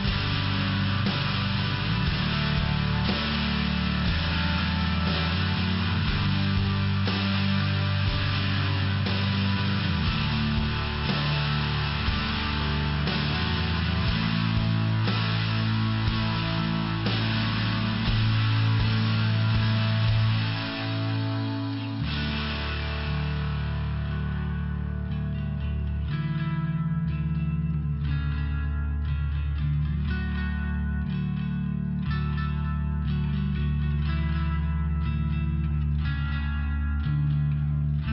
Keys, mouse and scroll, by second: 0.9 click, 5.7 click, 8.0 click, 10.6 click, 15.4 click, 19.4 click, 20.5 click, 24.5 click, 27.4 click, 28.3 click, 28.5 click, 28.6 click, 28.8 click, 29.7 click, 31.2 click, 32.1 click, 37.9 click.